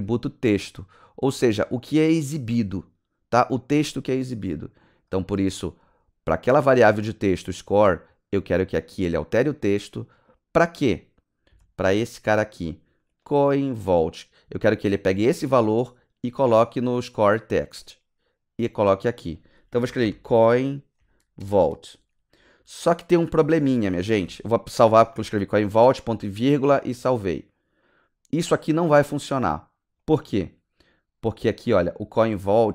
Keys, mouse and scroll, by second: 4.9 click, 5.7 click, 5.9 click, 8.6 click, 8.8 click, 9.6 click, 9.8 click, 10.3 click, 11.5 space, 13.0 click, 13.2 click, 17.7 click, 17.8 z, 19.5-20.9 typing, 21.4 Return, 23.5 ;, 24.2 ctrl+s, 30.0 click, 30.1 click, 31.9 click.